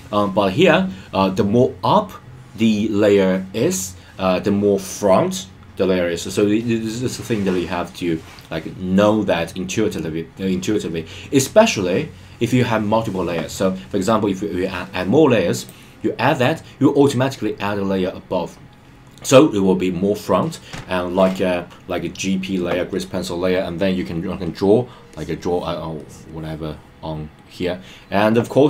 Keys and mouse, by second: 15.5 click, 25.1 click, 26.0 click.